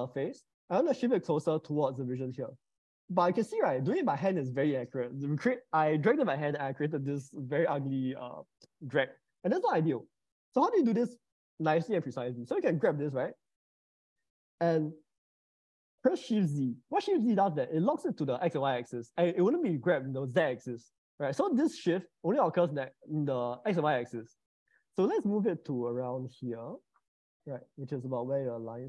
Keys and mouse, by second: 0.7 g, 3.1-9.0 middle drag, 11.0 ctrl+z, 13.0 g, 16.5 shift+z.